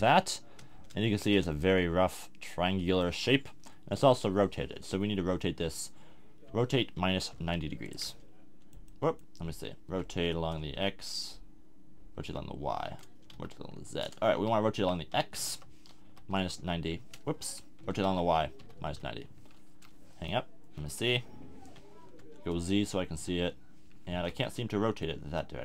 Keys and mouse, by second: 3.4 KP_1, 6.5 r, 8.1-9.7 drag, 9.8-13.0 middle drag, 9.9 r, 14.8 r, 17.8 r, 20.9 middle click, 20.9 KP_1, 22.0 z, 23.1 r.